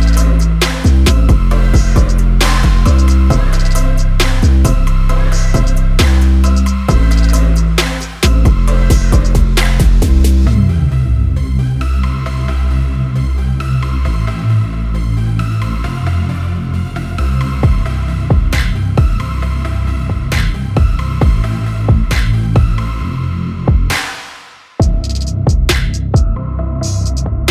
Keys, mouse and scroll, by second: 16.4 Up, 16.6 Up, 16.7 Up, 16.9 Up, 17.2 Up, 17.4 Up, 19.6 click, 21.5-27.5 ctrl+shift+drag.